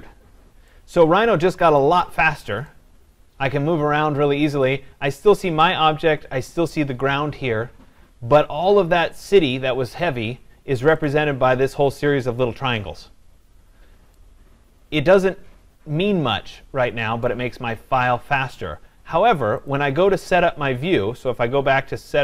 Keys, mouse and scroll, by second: 0.5 scroll down 2, 2.0 right click, 2.1-3.0 scroll, 4.8 right click, 5.1-5.7 scroll, 6.2-7.1 scroll, 8.0-9.7 scroll, 11.3 click, 12.2 scroll, 12.7 scroll, 17.5 right click, 20.0 click.